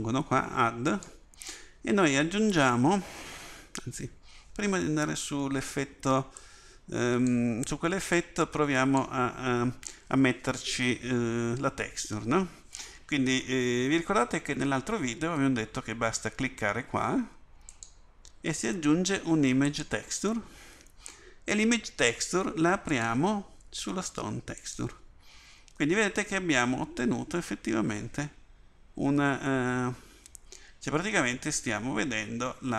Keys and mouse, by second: 8.1 click, 28.3-29.6 middle drag, 31.3-32.7 middle drag.